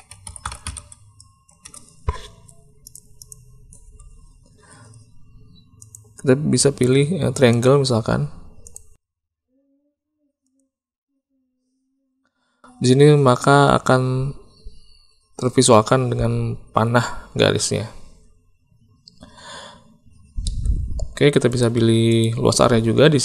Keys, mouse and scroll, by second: 3.1 click, 5.7-7.6 drag, 8.6-10.5 drag, 20.4 shift+middle click, 21.4 click, 22.1 click.